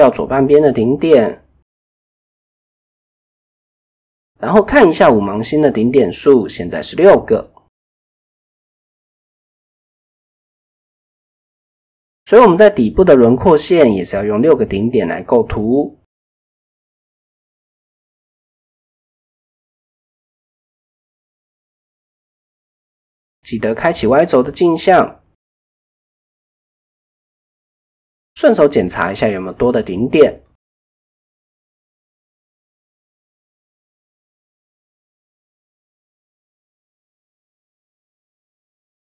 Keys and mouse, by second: 0.5 x, 1.4 shift+middle click, 3.6 click, 4.2 click, 8.7 KP_1, 8.9 KP_3, 9.7 shift+middle click, 10.6 shift+middle click, 10.9 middle click, 11.8 click, 12.3 shift+click, 14.2 f, 15.3-16.7 right drag, 17.7 KP_3, 19.5-21.0 drag, 21.8 click, 24.4 shift+middle click, 27.0 shift+middle click, 27.3 middle click, 28.7 shift+middle click, 29.8 click, 30.4 click, 31.2 ctrl+z, 32.9 KP_1, 33.2 KP_3, 34.1 shift+middle click, 35.5 shift+middle click, 36.6 shift+middle click.